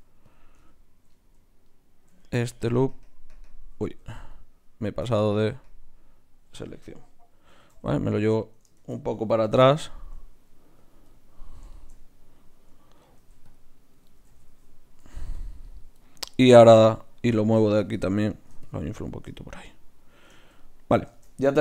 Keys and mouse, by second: 1.6-3.3 drag, 4.3-6.4 drag, 7.5 g, 8.8 shift+Tab, 9.4 g, 13.2 ctrl+r, 14.3 ctrl+z, 15.0 ctrl+r, 16.6 Tab, 17.8-20.7 drag.